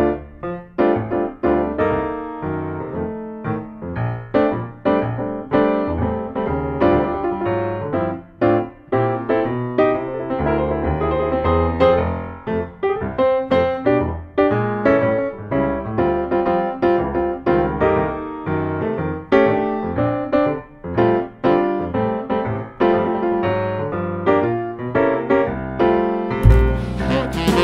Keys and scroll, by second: 6.4 d, 6.6 ctrl+v, 7.1 super+c, 7.4 super+v, 19.7 ctrl+d, 20.3 super+d, 24.6 ctrl+d, 25.4 super+d.